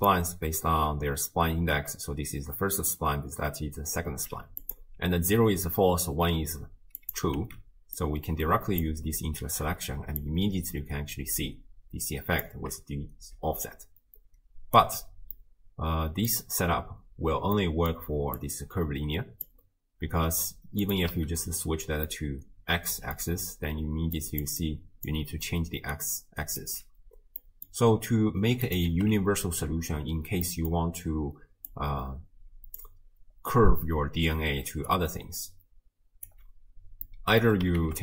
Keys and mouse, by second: 0.0 click, 1.7-4.2 d, 4.6 click, 4.6 d, 7.1 click, 8.0-8.8 drag, 8.0 x, 10.2-12.4 shift+drag, 13.3 d, 13.6-14.8 right drag, 14.8 d, 15.1 d, 15.4-16.3 middle drag, 17.6 click, 18.4-19.5 drag, 20.9 click, 22.1-23.2 middle drag, 23.8-26.8 typing, 24.2 click, 24.6 click, 27.4 click, 28.7 click, 30.5 click, 30.8-33.3 d, 32.8 click, 34.6 d, 34.9-36.3 drag, 36.3 d, 37.1 click, 37.1 d, 37.8 ctrl+a.